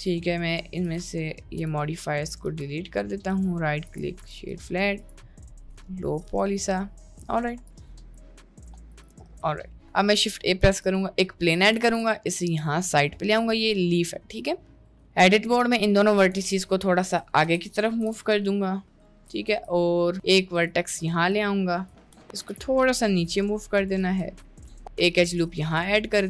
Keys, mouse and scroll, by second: 0.9 click, 2.5 click, 3.5-4.1 drag, 4.3 drag, 5.1 click, 5.3-5.9 middle drag, 6.2 middle click, 7.0 middle click, 8.2-9.2 drag, 9.8 middle click, 10.1 shift+a, 11.9 g, 13.3-14.1 middle drag, 14.5 middle click, 14.7 Tab, 14.9 click, 16.5 g, 17.5 o, 18.0 g, 19.5 ctrl+r, 20.1 ctrl+r, 21.9 middle click, 22.4 g, 24.2 ctrl+r.